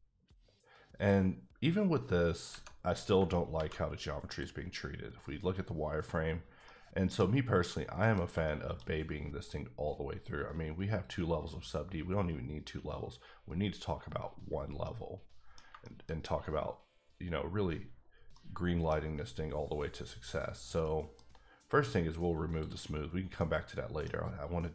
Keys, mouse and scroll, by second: 1.0 click, 2.8-3.1 scroll down 1, 3.5 alt+v, 4.3 click, 4.9 scroll up 2, 5.4 scroll down 2, 6.6 middle click, 7.7 middle click, 8.3 shift+middle click, 8.8 middle click, 9.4-11.0 scroll down 2, 11.0 click, 14.4-14.8 scroll down 1, 14.8 middle click, 15.5 scroll down 2, 15.8 shift+middle click, 16.1 scroll up 1, 18.0-18.3 scroll down 1, 18.3 middle click, 19.5-20.4 scroll up 2, 20.8 middle click, 22.5 click, 23.2 scroll down 1, 23.4 middle click, 24.2 scroll up 1.